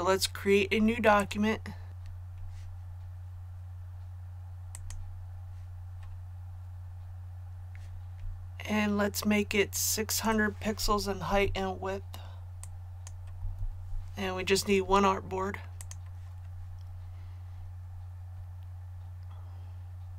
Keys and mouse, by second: 11.3 KP_6, 12.6 click, 13.4 KP_6, 15.8 click.